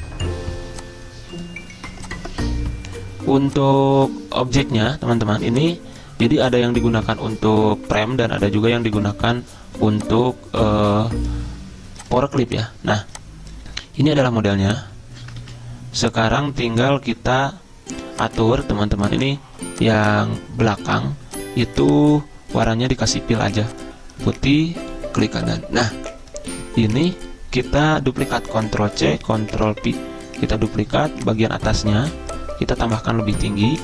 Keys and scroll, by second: 14.3 a, 15.4 ctrl+z, 16.4 z, 28.9 ctrl+c, 29.5 ctrl+v.